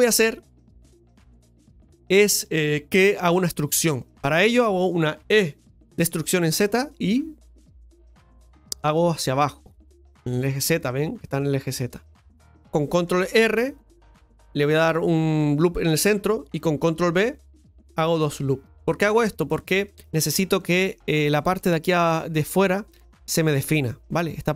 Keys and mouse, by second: 0.5 middle click, 1.2 middle click, 3.0 a, 3.3 middle click, 4.0 shift+middle click, 12.1 middle click, 19.8-22.5 middle drag.